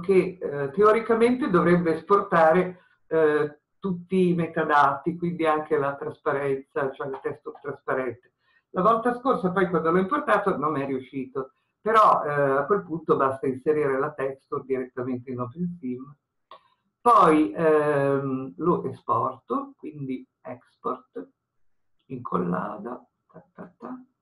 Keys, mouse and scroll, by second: 4.0-24.2 middle drag.